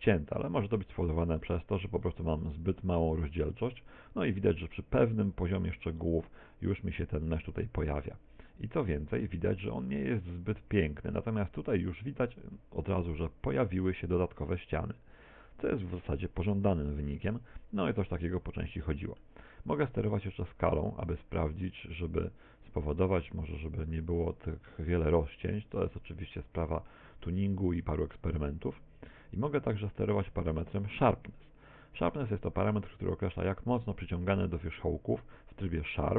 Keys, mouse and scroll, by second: 2.1 click, 2.8 click, 6.1 middle click, 8.0 middle click, 9.9-10.9 scroll up 5, 11.1 middle click, 15.9 middle click, 17.6-18.1 scroll down 5, 18.2 middle click, 19.1 middle click, 20.3 click, 22.7-27.9 click, 28.5 click, 31.7 click.